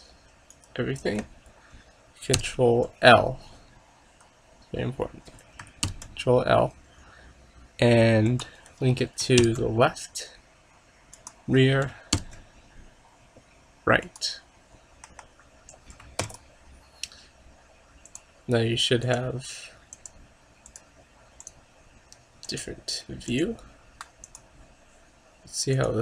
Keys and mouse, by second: 2.4 ctrl+l, 6.0 ctrl+l, 11.0 ctrl+l, 12.2 ctrl+l, 14.8 middle click, 15.1 KP_0, 16.3 ctrl+s, 18.1-19.9 drag, 20.1-21.1 drag, 21.7-23.3 drag, 23.4-25.0 drag.